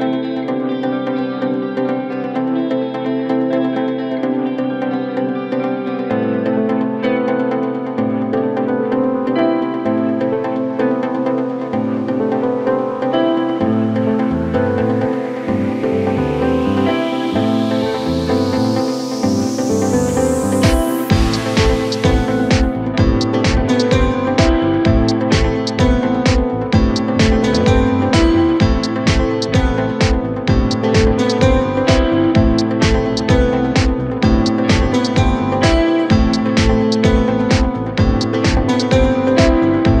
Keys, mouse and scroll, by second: 1.0 i, 2.3 scroll down 1, 2.9 KP_1, 3.6-4.4 scroll down 5, 4.4 e, 6.1 x, 7.5 a, 8.3 g, 11.0 Tab, 12.1 click, 14.3-15.6 drag, 16.1 click, 17.3 click, 18.0-18.5 scroll up 1, 18.5 Tab, 19.0-19.5 scroll up 1, 19.5 2, 20.1 click, 20.9 g, 22.9-24.2 scroll down 3, 24.2-24.9 shift+middle drag, 24.9-25.3 scroll up 5, 25.3-26.6 middle drag, 26.6-27.6 scroll up 1, 27.6 ctrl+r, 29.8 KP_1, 30.6 s, 33.0-34.5 middle drag, 34.5-35.7 scroll up 1, 35.7 KP_1, 36.7-37.6 scroll up 1, 37.6 3, 38.2 click, 38.4 click, 38.9 middle click, 39.8-40.0 scroll down 1.